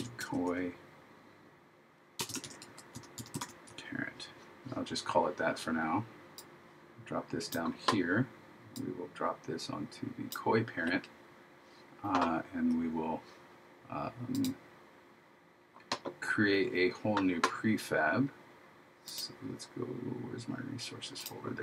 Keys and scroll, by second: 2.5 shift+p.